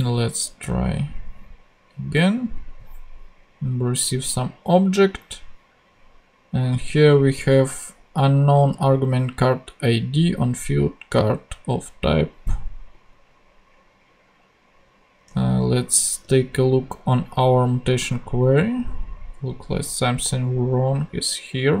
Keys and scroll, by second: 15.2 super+Tab.